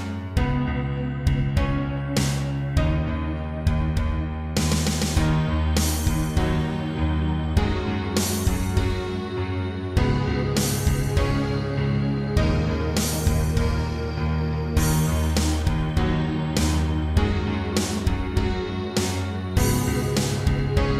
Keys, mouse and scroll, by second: 1.6 shift+middle click, 3.0 click, 4.2 7, 5.4 click, 6.2 shift+middle click, 6.4 middle click, 7.4-7.7 typing, 8.6 click, 8.9 Tab, 9.1 middle click, 9.9 scroll up 1, 10.8 7, 11.5 middle click, 12.5 scroll up 3, 13.1 scroll down 3, 14.0 Tab, 14.3 middle click, 15.4 s, 16.3 click, 16.5 click, 17.1 middle click, 18.5 scroll up 3, 18.7 Tab, 19.9 shift+middle click.